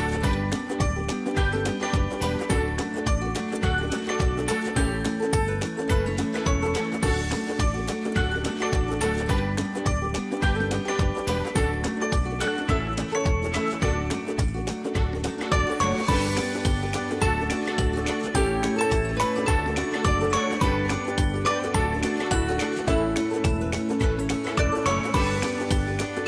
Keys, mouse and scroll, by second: 3.5 ctrl+space, 3.8 ctrl+click, 4.0 ctrl+space, 5.3 click, 5.5 space, 6.0-11.1 alt+drag, 11.1 ctrl+e, 12.5 click, 12.6-23.4 ctrl+drag, 23.4 right click.